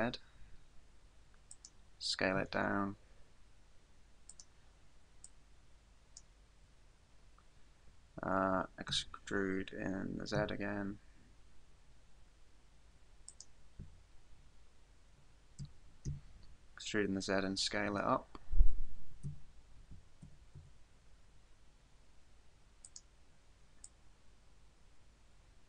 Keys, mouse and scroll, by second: 1.6 click, 2.4 s, 4.4 click, 5.2 click, 6.7-7.2 scroll up 3, 8.9 e, 13.4 click, 15.6 e, 20.6 s, 23.0 click, 23.8 click.